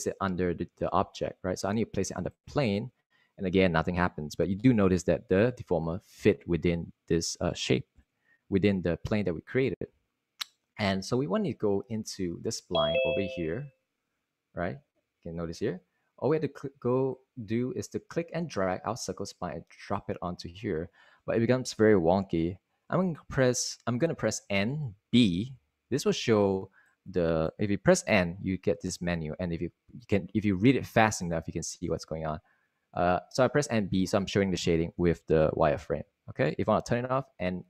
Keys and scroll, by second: 25.1 n, 26.0 b, 28.6 n, 29.7 n, 31.4 n, 36.3 b, 37.3-37.6 typing.